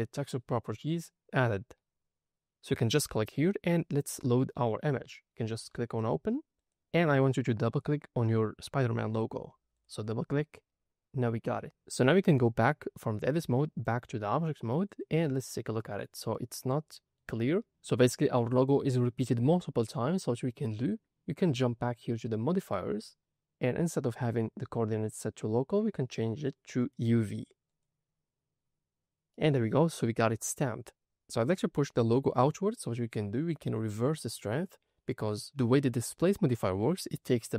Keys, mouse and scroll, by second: 3.2 click, 5.0-6.0 scroll down 3, 6.5 click, 11.6 Tab, 13.7-14.9 drag, 15.7 middle click, 17.3 scroll up 2, 18.6-19.4 middle drag, 22.5 click, 26.0-27.7 drag, 29.3-30.0 middle drag, 30.3 scroll down 2, 30.8 scroll up 1, 31.0 middle click, 31.6 middle click.